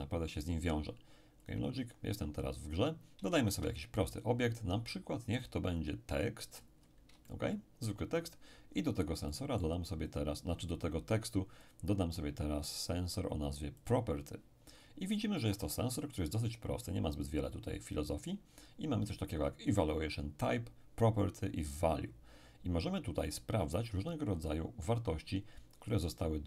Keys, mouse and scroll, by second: 1.4 click, 2.7-3.8 scroll up 1, 3.3 shift+a, 5.7 click, 6.5-7.2 scroll up 1, 7.2-8.7 shift+middle drag, 8.7-9.3 shift+scroll up 3, 9.3-11.1 middle drag, 10.1 click, 11.6 click, 13.8 click, 15.4-16.9 middle drag.